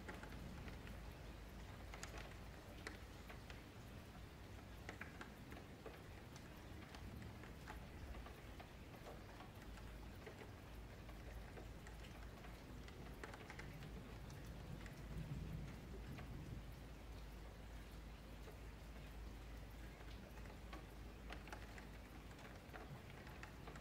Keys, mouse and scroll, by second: 0.1-0.5 scroll up 7, 0.5-1.0 shift+middle drag, 1.0 click, 1.3 scroll up 2, 1.6 Tab, 2.0 2, 2.2 alt+click, 2.5-3.4 scroll up 5, 2.8 1, 3.4 click, 4.5 click, 5.3 shift+middle click, 6.2 ctrl+z, 6.5 ctrl+z, 6.9 ctrl+z, 7.2 ctrl+z, 7.4 ctrl+z, 8.0 ctrl+z, 8.2 ctrl+z, 8.5 ctrl+z, 8.7-10.0 scroll down 4, 10.0 click, 10.4 g, 11.1 Tab, 11.5 1, 11.8-12.1 scroll up 2, 12.1 click, 13.4 g, 15.4 F3, 15.7 click, 16.4 F3, 17.2 g, 23.4 scroll down 3, 23.7 Tab.